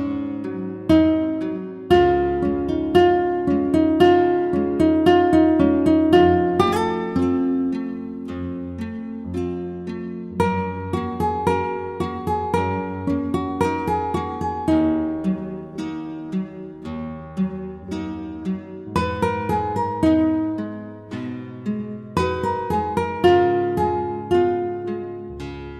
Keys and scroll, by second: 0.0 Return, 18.0 Return.